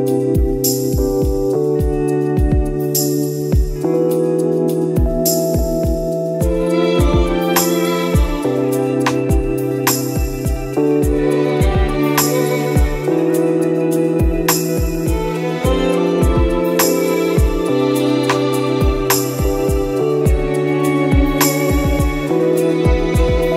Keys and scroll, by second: 1.5 ctrl+d, 6.9 Delete, 7.5 ctrl+e, 12.9 ctrl+e, 13.1 ctrl++, 13.3 space, 14.6 space, 16.1 ctrl+z, 16.5 space, 17.7 space, 18.6 space, 20.2 ctrl+-, 20.5 space, 20.8 ctrl+z, 22.7 ctrl+-, 22.8 space.